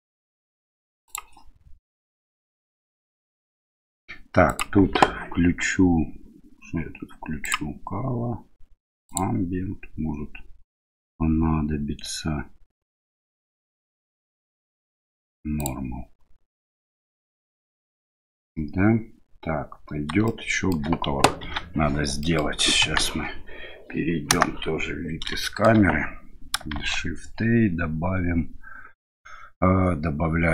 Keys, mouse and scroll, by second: 4.6 click, 7.5 click, 9.1 click, 15.6 click, 20.4 shift+middle click, 21.5 ctrl+s, 22.4 middle click, 22.9 KP_1, 24.4 KP_0, 25.5-25.8 shift+middle drag, 26.8 shift+a.